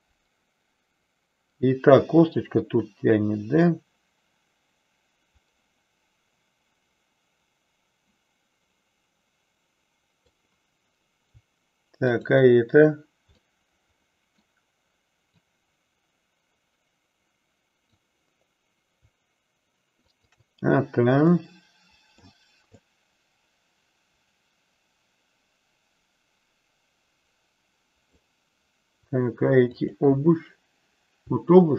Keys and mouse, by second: 12.1 shift+click, 13.5-14.5 middle drag, 15.4-17.9 drag, 20.2 shift+click, 21.4 middle click, 22.8-28.1 drag, 29.6 shift+click.